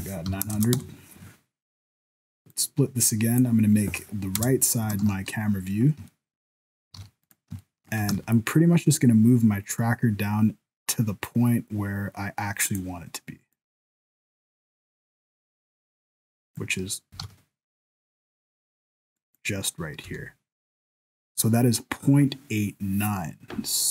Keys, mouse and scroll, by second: 0.5 KP_0, 2.5 click, 4.4 KP_0, 5.1 ctrl+s, 5.4 scroll up 4, 5.7 scroll down 1, 6.1 shift+middle click, 7.0 alt+a, 7.2 right click, 7.7 shift+middle click, 8.0 g, 13.5 click, 17.1 g, 20.0 n.